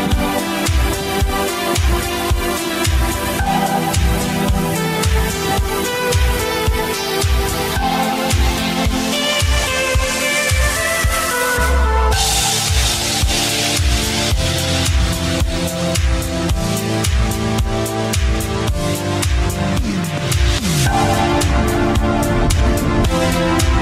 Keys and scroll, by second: 4.4 q, 10.8 g, 14.3 g, 14.9 g, 15.2 g, 22.0 q.